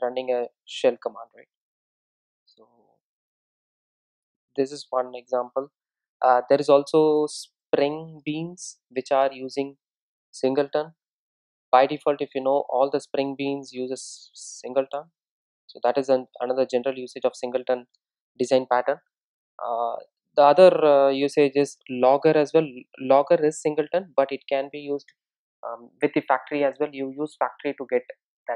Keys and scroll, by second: 3.0 super+x, 4.4 super+x, 6.6 super+v.